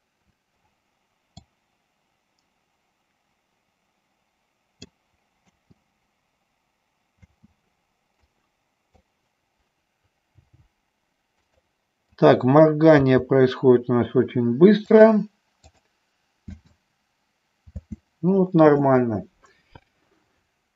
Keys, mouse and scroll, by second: 1.7-5.5 drag, 5.6 space, 8.4 click, 8.4 space, 10.6 g, 11.7 click, 12.3 click, 16.0 click, 16.6 space.